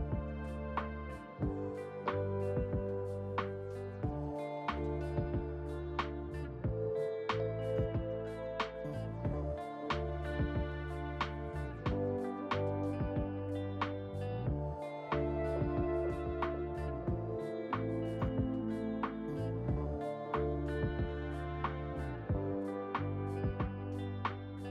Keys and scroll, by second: 1.2 r, 20.4 `.